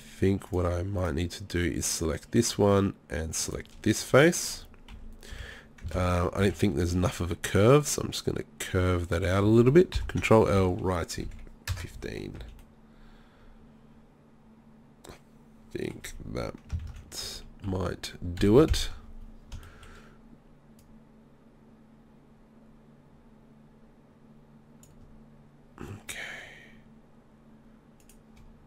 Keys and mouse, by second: 1.0-3.4 middle drag, 4.0 z, 4.9 KP_3, 5.3 KP_1, 5.9 ctrl+KP_1, 6.4 z, 10.0 ctrl+l, 10.6 r, 11.9 z, 12.4 z, 16.9 ctrl+z, 17.2 KP_1, 17.6 KP_3, 18.4 KP_1, 28.0-28.6 drag.